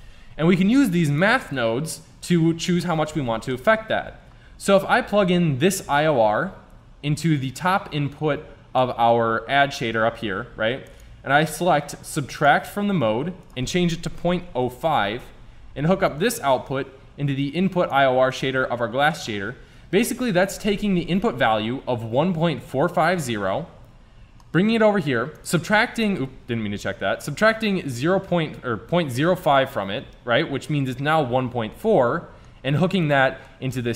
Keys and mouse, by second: 0.8-2.8 drag, 3.6-5.3 drag, 10.9-12.9 drag, 13.4-15.4 drag, 16.1-18.1 drag, 18.3-19.7 drag, 19.8 middle click, 20.8 Tab, 23.2 Tab.